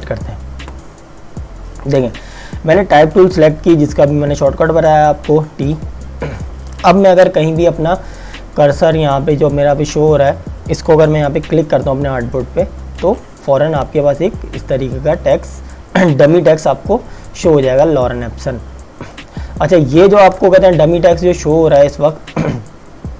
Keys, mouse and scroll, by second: 13.1 click, 19.2 click, 20.3 ctrl+a.